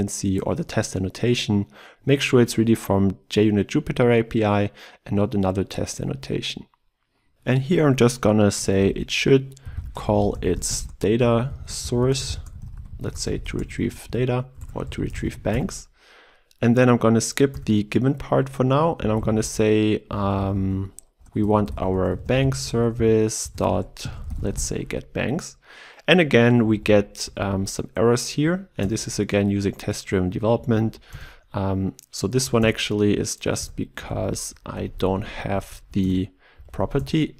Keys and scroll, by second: 1.9 alt+Return, 14.6 ctrl+BackSpace, 28.8 alt+Return, 36.0 alt+Return.